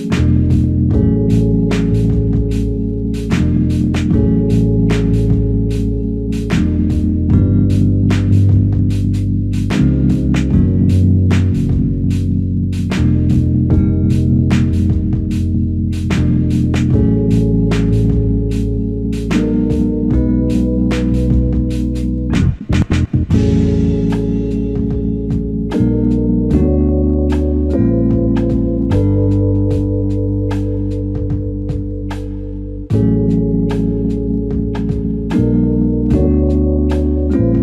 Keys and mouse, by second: 0.4 alt+click, 3.6 double click, 4.8 alt+click, 9.8 f, 11.5 alt+click, 12.8 double click, 13.8 alt+click, 15.0 double click, 16.0 alt+click, 16.8 double click, 17.2 alt+click, 19.3 double click, 22.7 ctrl+click, 24.0 alt+click, 27.3 ctrl+z, 27.6 ctrl+z, 28.2 ctrl+z, 29.6 ctrl+click, 32.2 alt+click, 34.5 f, 34.5 shift+click.